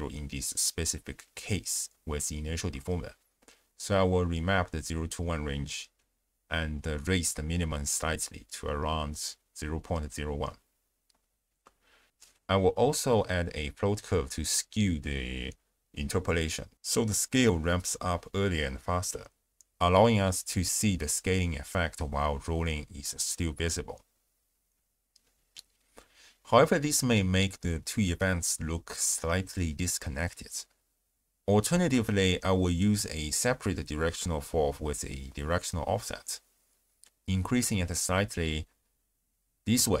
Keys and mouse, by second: 2.3 ctrl+a, 6.1 click, 7.5-10.4 drag, 11.6 click, 13.1 click, 13.4 shift+space, 14.2 click, 14.6 space, 14.7 click, 14.9 click, 15.2 ctrl+a, 16.0 click, 17.2-18.4 drag, 19.1 click, 20.2 shift+space, 21.8-23.0 drag, 23.2 shift+space, 25.2 space, 31.5 click, 32.4 click, 33.2 click, 33.8 shift+d, 34.6 click, 35.2 click, 36.2-37.5 drag, 38.5-40.0 shift+drag.